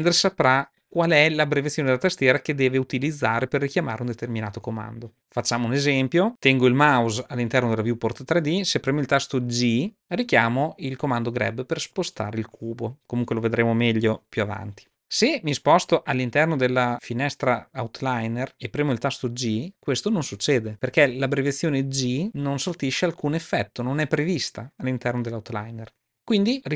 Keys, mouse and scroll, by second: 9.8 g, 19.6 g, 20.7 g, 20.8 g, 21.0 g.